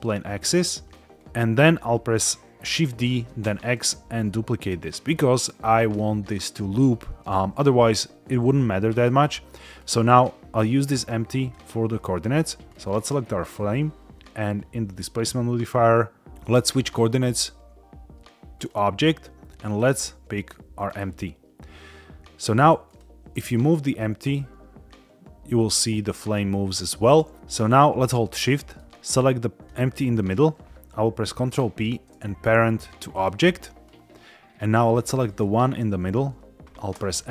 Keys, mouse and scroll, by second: 0.4-0.8 scroll down 2, 0.8 middle click, 1.1 scroll down 1, 2.9 shift+d, 3.3 x, 4.7 click, 5.0 middle click, 5.1 scroll, 7.2 scroll up 1, 8.9-9.4 middle drag, 9.7 scroll up 1, 11.3 click, 11.9-12.3 middle drag, 12.6 scroll up 1, 13.1 shift+middle click, 16.5-18.6 drag, 19.6 click, 20.8 click, 22.8 click, 23.3 g, 26.7 Escape, 27.3 shift+middle click, 27.3 scroll down 2, 28.4 middle drag, 29.6 shift+click, 31.2 ctrl+p, 33.8 scroll down 1, 35.2 click, 36.9 n.